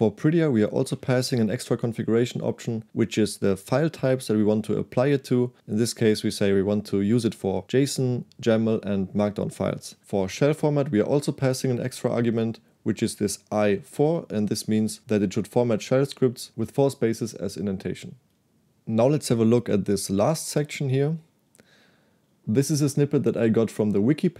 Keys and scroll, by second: 0.9 shift+v, 10.0 j, 11.1 shift+v, 20.6-22.1 typing.